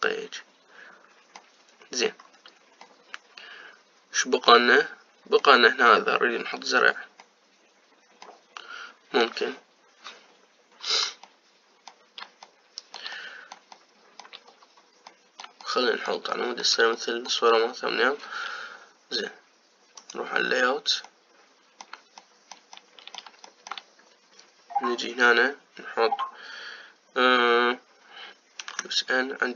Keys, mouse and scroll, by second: 2.5-3.7 scroll down 3, 3.7-6.7 middle drag, 8.3-15.3 middle drag, 15.3-16.0 scroll up 2, 16.0-21.0 middle drag, 21.0 click, 21.9-29.5 middle drag, 29.5 n.